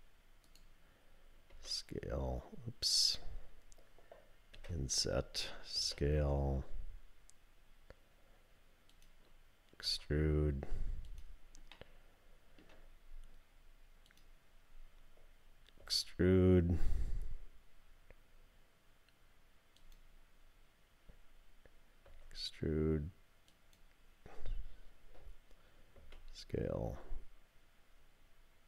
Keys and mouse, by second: 1.5 s, 4.5 i, 5.8 s, 8.9 click, 11.1 e, 11.8 click, 15.8 e, 22.1 e, 26.0 s.